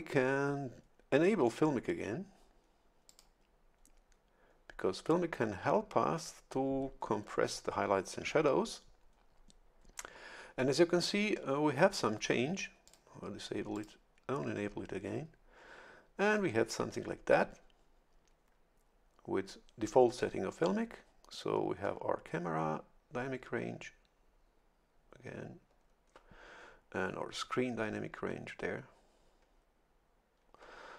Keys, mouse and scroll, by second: 3.0 click, 12.8 click, 13.7 click.